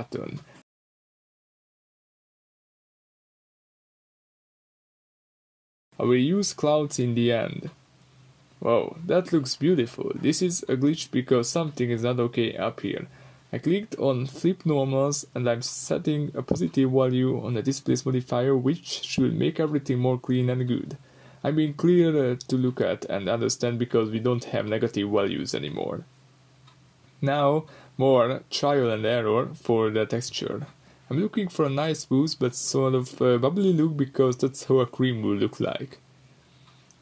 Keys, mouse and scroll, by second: 0.8 Return, 2.6-4.7 middle drag, 3.9-4.7 scroll down 2, 4.7-7.6 drag, 7.6-9.8 middle drag, 9.8-12.3 drag, 12.7-13.9 scroll down 2, 13.9-17.9 drag, 17.9-19.3 middle drag, 19.8 scroll up 2, 20.5 middle click, 20.5 scroll up 1, 20.7 click, 21.6-23.2 middle drag, 21.9-22.6 scroll down 2, 22.6-23.2 scroll down 1, 23.2-25.5 drag, 25.5-26.9 middle drag, 26.9-27.3 scroll up 2, 27.3-33.3 middle drag, 33.3 click, 33.8 click, 35.1-37.0 drag.